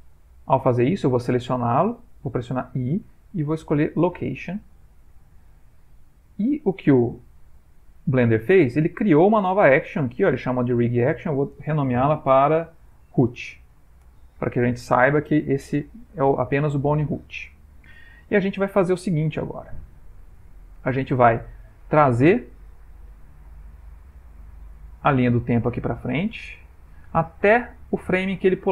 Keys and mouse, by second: 11.0 click, 13.4 o, 19.2 middle click, 19.9 ctrl+middle click, 20.4 middle click, 20.9 ctrl+middle click, 21.5 middle click, 24.8 Right, 25.3 Right, 26.1-27.8 Right, 28.3 Right, 28.5 Right.